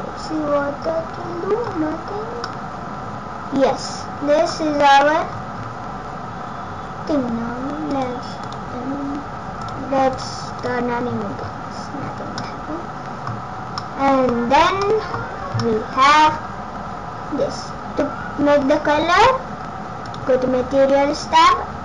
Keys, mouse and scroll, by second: 1.8 scroll down 3, 2.5 middle click, 2.5 scroll down 3, 4.8 scroll up 3, 5.3-5.6 scroll down 6, 5.5 scroll up 4, 6.4 scroll up 1, 8.0 click, 8.5 click, 9.7 click, 10.1 click, 10.6 click, 11.4 scroll down 5, 12.0 scroll up 4, 12.4 middle click, 13.8 middle click, 14.8 middle click, 15.6 middle click, 20.1 click.